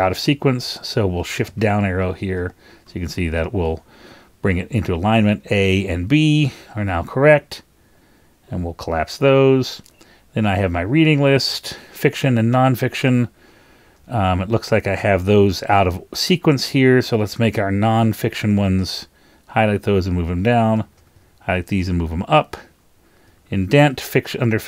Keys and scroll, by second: 1.6 shift+super+Down, 2.0 shift+super+Up, 2.3 shift+super+Down, 2.8 shift+super+Up, 3.3 shift+super+Down, 18.8 shift+Down, 18.9 shift+Down, 19.7 shift+super+Down, 20.8 shift+Down, 20.9 shift+Down, 21.3 shift+super+Up, 21.5 shift+super+Up, 22.2 shift+super+Up, 23.3 shift+Down.